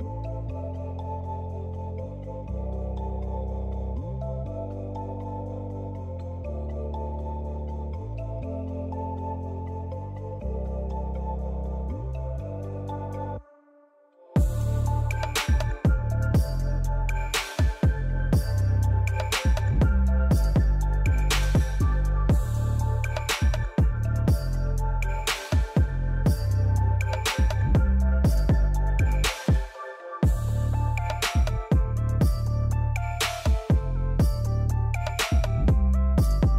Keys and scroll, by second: 4.4-5.9 typing, 9.9 ctrl+c, 10.1 ctrl+v, 18.3 j.